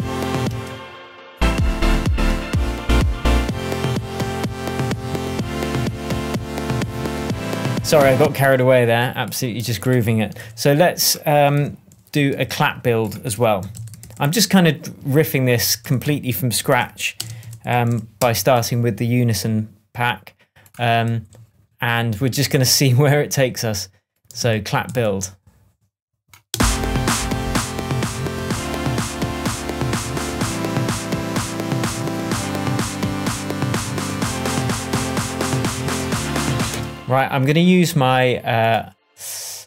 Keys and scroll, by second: 0.4 space, 8.1 space, 10.3 super+t, 11.5-14.6 typing, 13.2 shift+super+c, 13.3 shift+super+r, 13.6 shift+super+r, 15.6-18.3 typing, 21.0 ctrl+Down, 24.3 ctrl+Up, 24.8 ctrl+Right, 26.4 space, 36.6 space.